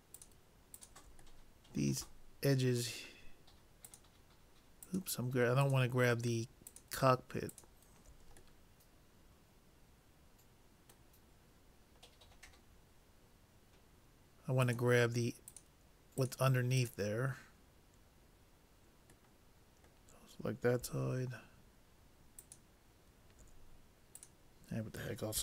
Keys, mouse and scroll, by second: 1.5-3.8 middle drag, 3.9-9.3 drag, 8.7 middle click, 9.3-10.3 middle drag, 11.5-14.4 middle drag, 14.6-18.5 drag, 19.5-21.4 middle drag, 22.4-25.4 drag.